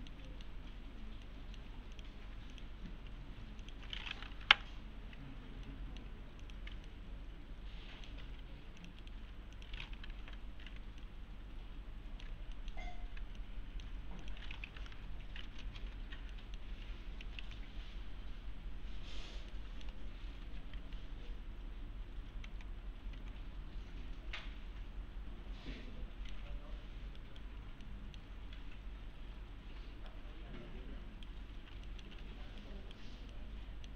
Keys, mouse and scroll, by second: 1.3-1.9 alt+middle click, 1.9 click, 2.5 ctrl+click, 3.6 ctrl+click, 5.7-6.3 alt+middle click, 6.4 click, 6.9-8.1 alt+middle click, 8.2 alt+1, 8.8 click, 9.0 right click, 9.6 click, 11.0-12.3 alt+middle click, 13.4-14.0 alt+middle click, 14.2 click, 15.8 alt+x, 16.3 middle click, 16.6-17.9 typing, 17.7-19.5 scroll down 1, 19.5-20.1 middle click, 20.1-20.7 scroll up 1, 22.5 alt+x, 24.4-26.6 alt+middle click, 27.2 right click, 27.5-27.8 scroll down 1, 27.8-28.5 middle click, 28.5-29.2 scroll up 1, 29.3-30.1 scroll down 1, 30.1-31.4 right click, 31.6 scroll down 1, 31.8-32.7 typing, 31.9 middle click, 32.6-33.2 right click, 33.3-33.9 middle click.